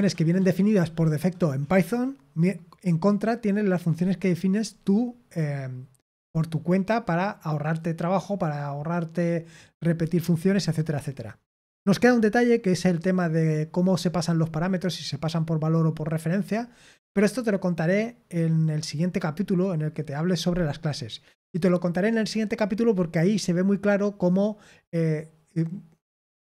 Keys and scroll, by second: 9.5-23.5 scroll up 1, 23.5-24.7 scroll up 1, 24.7-26.4 scroll up 1.